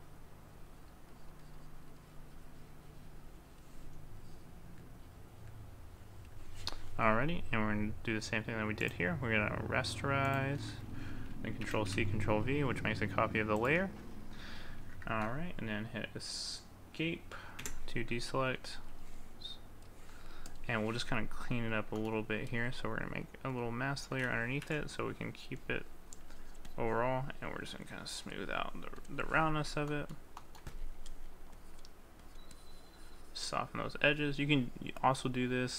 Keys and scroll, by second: 11.6 ctrl+c.